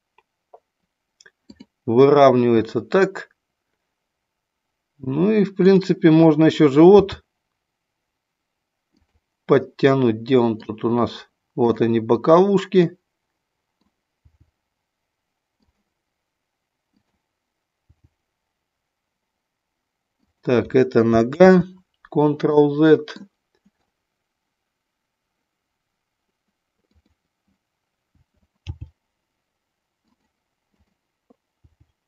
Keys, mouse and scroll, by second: 5.6 click, 7.0 g, 9.0 click, 9.5-10.6 middle drag, 11.6 click, 12.7-13.9 middle drag, 14.2 g, 17.9 g, 20.2 click, 21.3 ctrl+z, 22.5 middle click, 26.8 click, 28.7 g, 30.1 click, 30.6 click, 31.7 g.